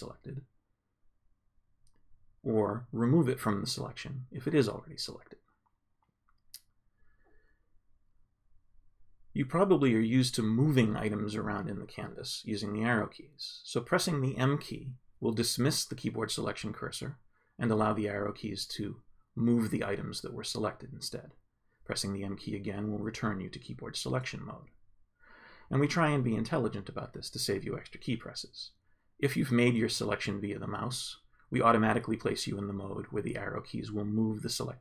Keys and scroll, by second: 0.3 ctrl+space, 2.9 ctrl+space, 8.1 m, 14.1 Up, 15.3 Down, 17.6 Left, 21.0 m, 33.5 Up.